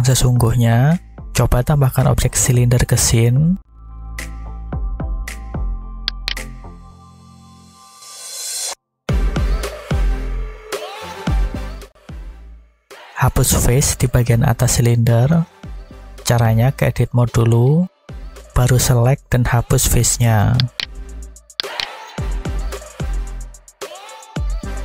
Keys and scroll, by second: 3.8 shift+a, 16.6 Tab, 18.9 alt+a, 23.9 x.